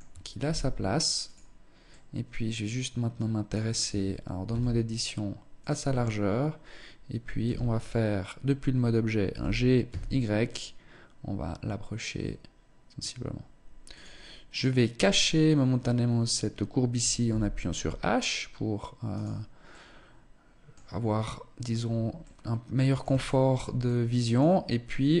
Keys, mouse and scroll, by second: 1.4 middle click, 3.4 Tab, 4.0 s, 5.4 Tab, 6.9 z, 8.8 g, 14.1 right click, 14.6 right click, 16.7 h, 18.6 right click, 19.2 middle click, 21.2-21.9 scroll up 2, 21.7 middle click, 22.7 shift+middle click, 23.3 middle click, 24.9 middle click, 25.0 shift+middle click.